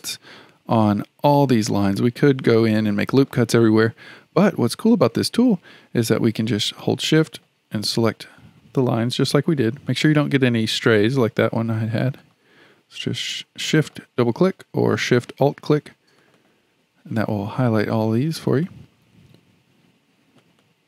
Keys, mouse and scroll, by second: 2.9-6.0 shift+middle drag, 7.1 shift+click, 7.3 shift+click, 9.9 click, 11.3 click, 12.0 click, 12.2 click, 13.6 shift+click, 13.9 shift+click, 16.2 shift+click, 16.4 shift+click, 18.5 shift+click, 18.7 shift+click, 20.4 shift+click, 20.6 shift+click.